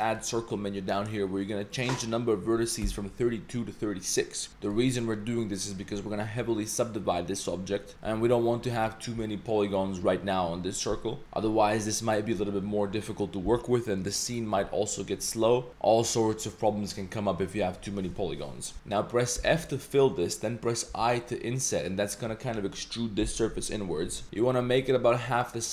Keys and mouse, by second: 1.4-4.7 drag, 8.2 Tab, 8.6 1, 18.7 i, 18.7 z, 19.4 f, 20.9 i, 24.2 s.